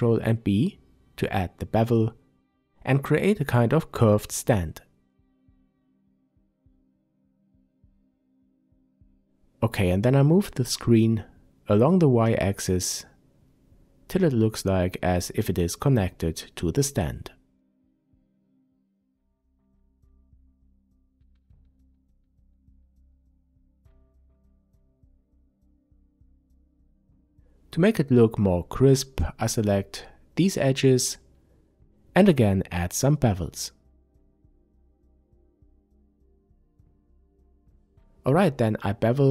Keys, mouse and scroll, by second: 1.6-10.1 middle drag, 7.7 Tab, 10.1 click, 10.9-15.7 drag, 15.7-24.5 middle drag, 18.8-19.2 scroll down 2, 23.8-24.5 scroll up 2, 24.5 click, 25.9 Tab, 26.5-27.6 middle drag, 27.6 click, 28.0-29.4 middle drag, 29.4 shift+click, 30.4 ctrl+b, 32.9 click, 33.2-36.3 middle drag, 34.2 a, 35.1 Tab, 36.3 click, 37.9-39.3 drag.